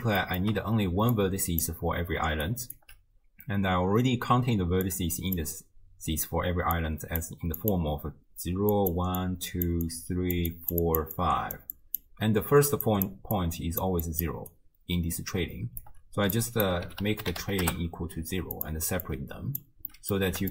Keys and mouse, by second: 0.3 shift+click, 0.9-14.5 typing, 1.2 right click, 4.9 click, 7.2 right drag, 7.6 click, 9.9 click, 10.5 click, 10.9 click, 11.2 click, 11.8 click, 12.9 click, 13.8 click, 14.9 click, 15.8 d, 15.9 d, 16.3-18.7 drag, 19.1-19.7 drag, 19.9 middle click.